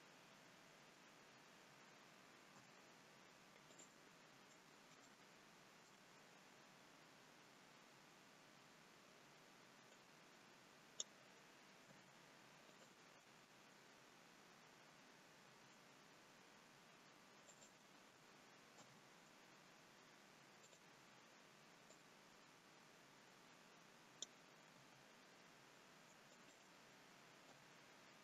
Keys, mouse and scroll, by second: 0.0 scroll down 2, 2.5 i, 4.4 scroll up 2, 5.0 shift+middle click, 9.9 click, 11.8 g, 15.4 g, 18.7 i, 21.9 click, 24.7 g, 27.5 i.